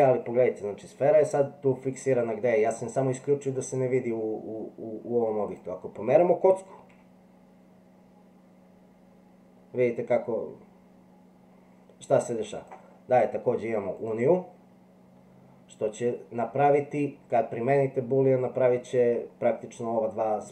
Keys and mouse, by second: 6.9 g.